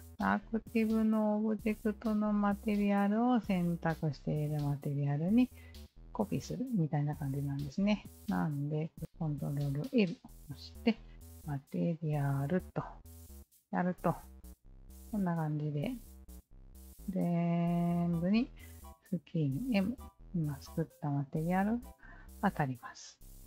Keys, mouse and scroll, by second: 9.0 ctrl+l, 12.5 click, 14.0 alt+drag, 14.5-15.1 alt+drag, 15.4 click, 15.7 alt+click, 16.7 alt+drag, 17.5 alt+click, 18.7 alt+click, 23.0 alt+click.